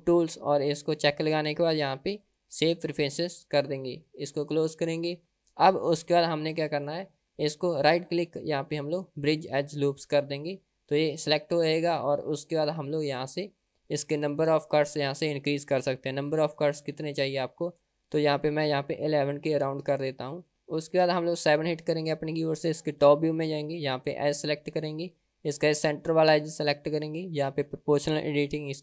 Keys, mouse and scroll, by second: 6.2 middle click, 7.8-10.4 right drag, 10.9 middle click, 12.7 middle click, 14.2 middle click, 16.2-18.0 drag, 18.2-20.4 drag, 19.4 KP_1, 20.6 middle click, 21.5 KP_7, 24.2 click, 25.0 click, 26.0 click.